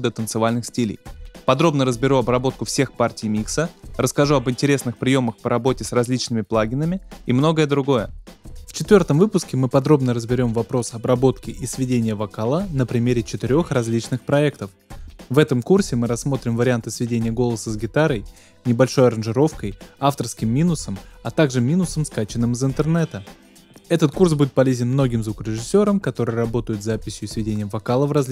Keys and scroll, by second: 12.5 space, 19.9 space, 26.4 space.